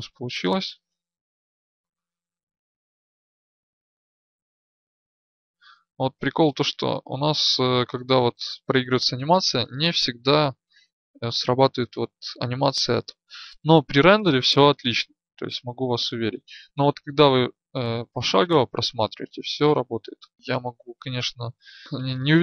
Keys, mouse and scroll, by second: 1.3 alt+a, 6.7 Escape, 15.2 Right, 15.5-20.3 Right, 20.3-21.8 Left.